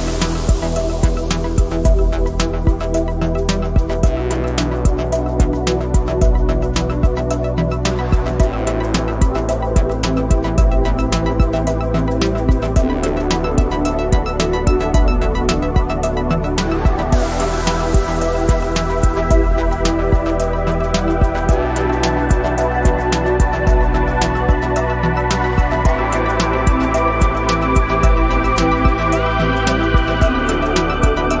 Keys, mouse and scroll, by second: 0.3 scroll up 1, 0.6 scroll down 1, 0.7 click, 1.4 click, 1.4 space, 1.4 space, 1.7 click, 3.9 space, 4.3 click, 6.2 space, 6.3 click, 7.0 space, 7.4 space, 7.9 click, 12.3 click, 17.2 click, 17.9 click, 22.0 click, 23.0 click, 23.6 click, 24.0 scroll up 1, 24.2 click, 24.6 Down, 25.0 space, 25.2 Down, 25.5 click, 25.7 Down, 26.8 click, 27.6 click, 27.7 space, 28.0 click, 28.6 ], 28.9 click, 29.3 ], 30.4 click, 30.6 [, 30.6 [, 30.7 click.